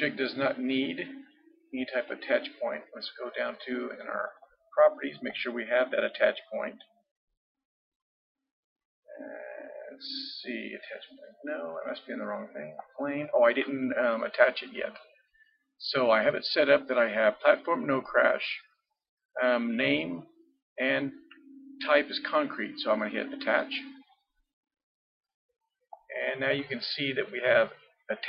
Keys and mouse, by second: 2.0-14.8 drag, 16.0-17.9 drag, 23.6-28.2 drag.